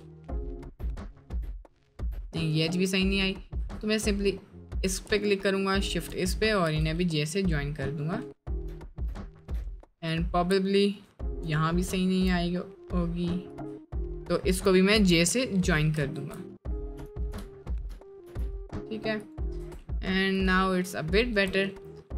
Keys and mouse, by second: 0.9 middle click, 2.3 middle click, 2.8 middle click, 3.6 1, 6.8 j, 7.5 middle click, 8.8 shift+middle click, 10.6 middle click, 11.2 shift+middle click, 11.6 middle click, 12.0 shift+middle click, 12.4 middle click, 15.1 j, 16.4 ctrl+z, 17.1 ctrl+click, 18.3 j, 19.7 Tab, 20.0 middle click, 20.8 middle click, 21.4 Tab.